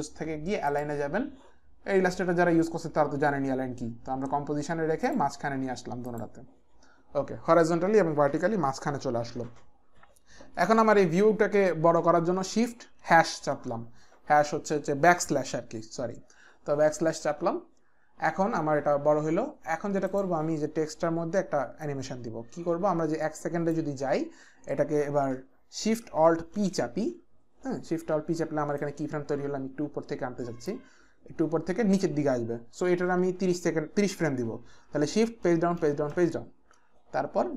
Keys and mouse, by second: 0.7 click, 6.1 click, 20.1 click, 21.9 click, 26.6 alt+shift+p, 28.7 click, 35.4 shift+Page_Down, 35.7 shift+Page_Down, 36.1 shift+Page_Down.